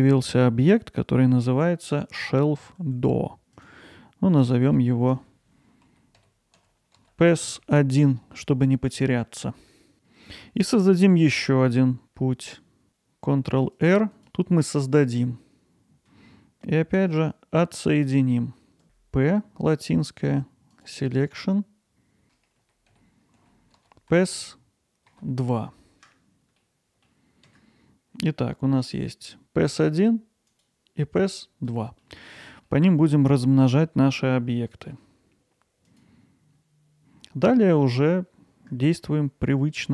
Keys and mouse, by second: 10.3 middle drag, 11.3-12.9 middle drag, 12.9 ctrl+r, 26.6-30.6 middle drag, 31.7-32.0 middle drag, 32.6 middle drag, 33.1 alt+middle drag, 33.9 alt+middle drag, 34.3-34.9 ctrl+alt+middle drag, 35.9 click.